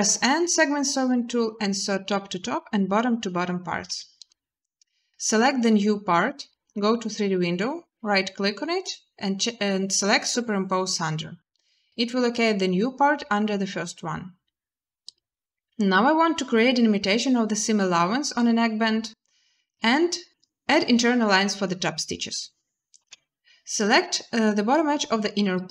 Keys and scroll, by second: 3.7 a, 22.8 z.